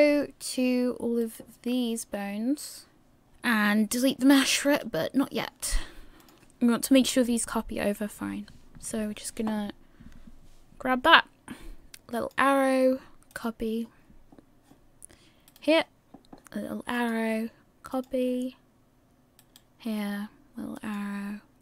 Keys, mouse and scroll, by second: 1.5 right click, 4.9 right click, 6.2 click, 6.4 click, 12.1 click, 15.8 right click, 16.9 click, 19.7 right click, 20.8 click.